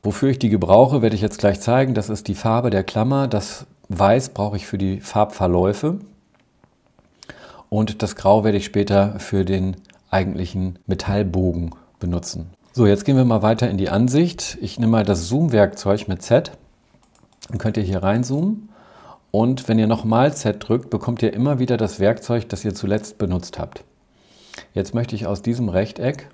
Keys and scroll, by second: 16.2 z, 20.2 z.